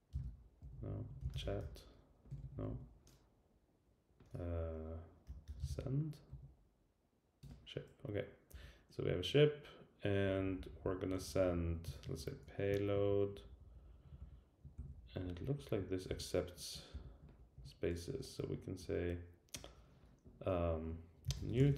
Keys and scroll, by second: 7.4 Return, 8.5 Down, 10.2 Down, 11.2 Down, 11.8 Down, 11.9 super+Right, 13.4 alt+Right, 14.1 alt+Right, 14.2 alt+Left, 14.7 Left, 14.9 alt+shift+Right, 16.1 shift+Left.